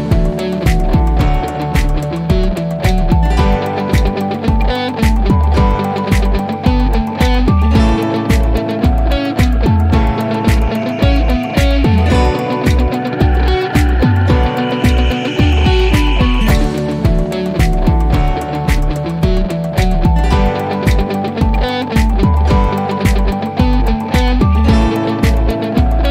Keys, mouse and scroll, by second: 2.0-4.9 drag, 8.3 click, 13.2 click, 18.5 click, 24.7-26.0 drag.